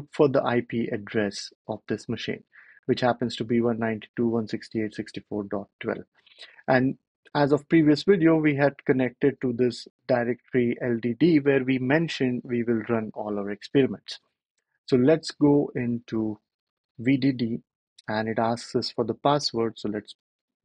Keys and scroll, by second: 19.9 typing.